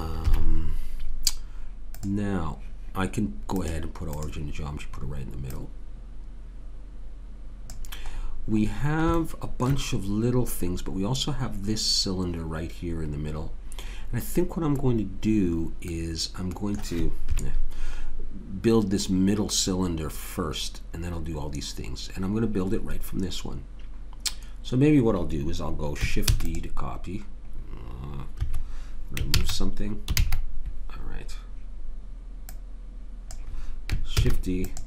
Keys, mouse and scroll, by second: 0.2 KP_3, 6.6-8.1 right drag, 8.1 middle click, 17.2 KP_3, 26.3 shift+d, 28.3 Escape, 29.3 ctrl+z, 30.2 ctrl+z, 32.5 click, 34.1 shift+d.